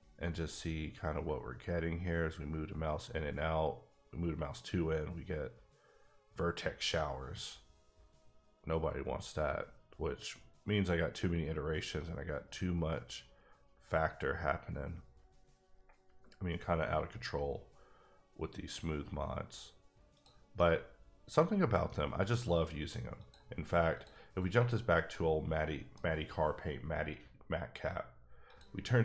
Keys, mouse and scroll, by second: 1.0 scroll up 3, 9.4-10.7 scroll down 4, 10.7-11.8 scroll down 6, 12.3-13.3 scroll down 10, 13.9-14.3 scroll down 3, 14.6 scroll down 5, 15.1-17.8 scroll up 8, 20.1 click, 20.5 middle click, 21.7 middle click, 23.1 click, 23.9 click, 24.5 click, 25.1 middle click, 26.9-28.5 scroll down 2, 28.5 click.